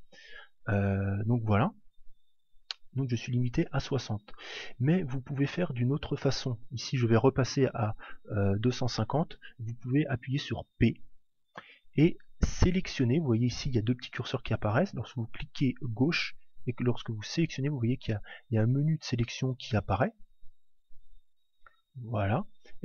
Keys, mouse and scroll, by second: 1.2 click, 6.1 click, 10.9 p.